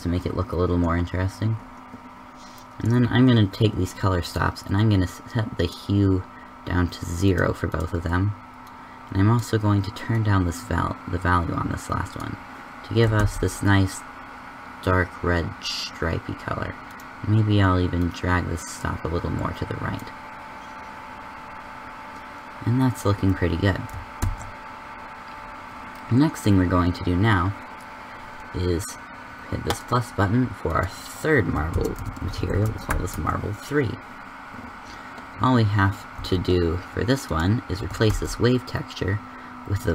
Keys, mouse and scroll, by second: 4.1-5.8 middle drag, 7.2-9.1 middle drag, 13.3 shift+z, 25.0 shift+z, 36.1 a, 38.2 shift+s.